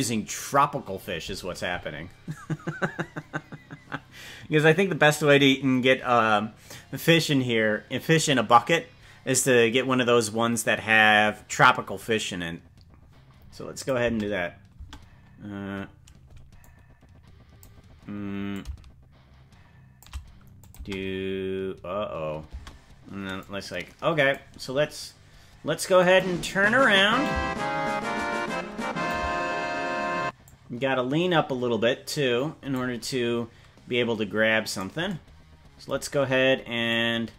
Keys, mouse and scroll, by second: 13.7 click, 14.1 space, 14.7 space, 14.9-15.3 scroll down 5, 16.6-17.6 drag, 18.5-20.1 shift+drag, 20.6 click, 20.7 space, 22.5 space, 23.4 click, 26.0 click, 27.2-29.1 drag, 30.4-32.7 drag, 34.7 right click, 36.8-37.3 drag.